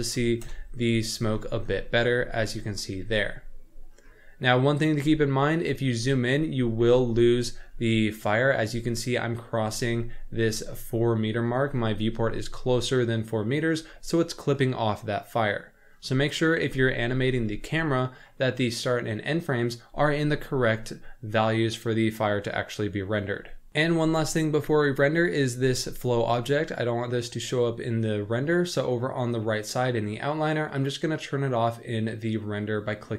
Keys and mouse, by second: 0.4 KP_0, 1.8 shift+middle drag, 3.0 z, 4.6 middle drag, 5.0 z, 6.9 z, 16.6 z, 17.3 z, 17.8-18.2 middle drag, 30.8 click.